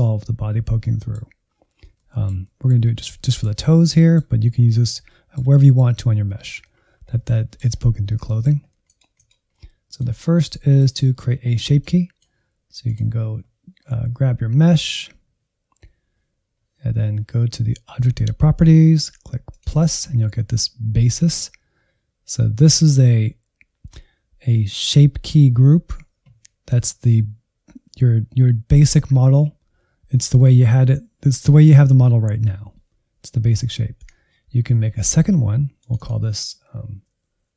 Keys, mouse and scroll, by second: 0.2-0.8 scroll up 1, 0.8 middle click, 1.6-1.9 scroll down 4, 1.9-5.9 shift+middle drag, 5.9-6.3 scroll down 1, 6.3 shift+middle click, 6.6-7.3 scroll up 7, 7.3 shift+middle click, 7.8-8.2 scroll up 1, 8.2 shift+middle click, 8.8-10.4 drag, 10.4-11.7 middle drag, 11.7-13.7 drag, 13.7-16.8 scroll down 2, 19.4-35.8 drag, 35.9-37.5 drag.